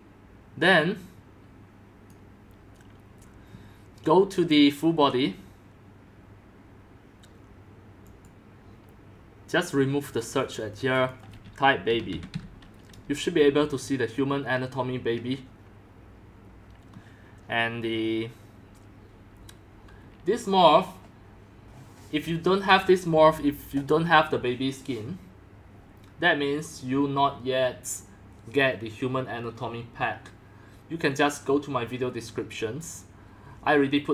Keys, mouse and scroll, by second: 1.7-7.5 drag, 8.2-10.0 drag, 11.1 click, 11.7-12.8 typing.